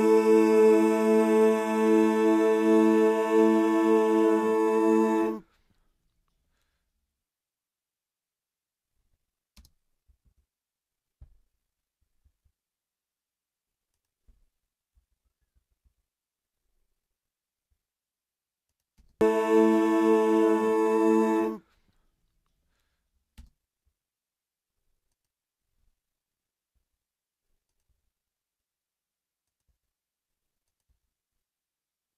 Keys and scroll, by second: 9.5 space, 10.0 super+space, 10.2 super+=, 14.9 t, 18.9 space, 23.3 space, 26.7 s, 27.8 s, 29.6 s, 30.9 s.